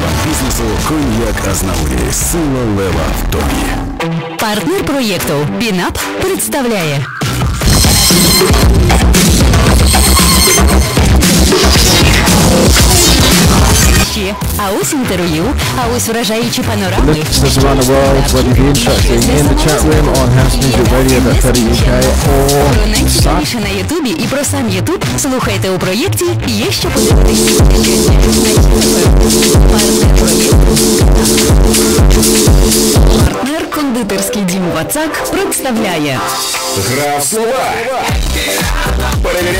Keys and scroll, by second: 14.0 Page_Down, 23.6 Page_Down, 33.2 Page_Down.